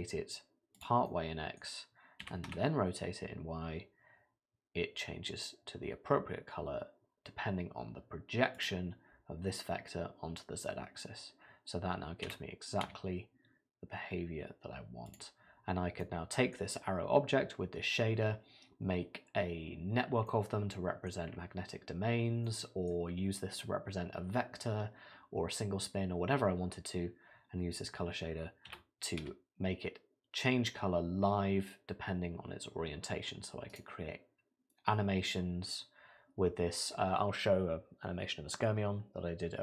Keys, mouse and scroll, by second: 1.1 middle click, 2.2 r, 12.3 r, 15.7-17.8 scroll down 3, 16.0 middle click, 20.3 middle click, 21.3 scroll up 4, 22.1 scroll down 2, 22.5 middle click, 28.7 r.